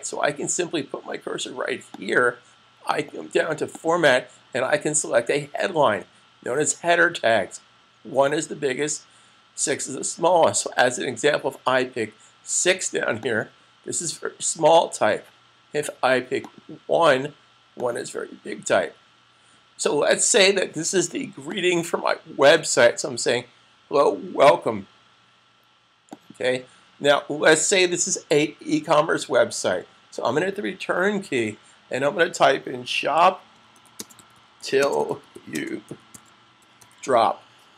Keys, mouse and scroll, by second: 12.8 click, 16.3 click, 21.4 click, 25.8 click, 32.5-37.1 typing.